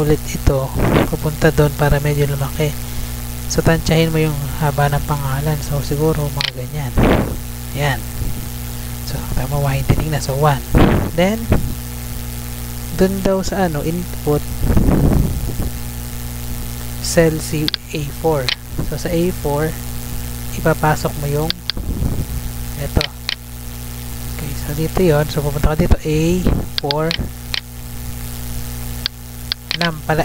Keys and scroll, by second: 11.0 Tab, 23.9 ctrl+c, 24.7 Tab, 28.3 Tab.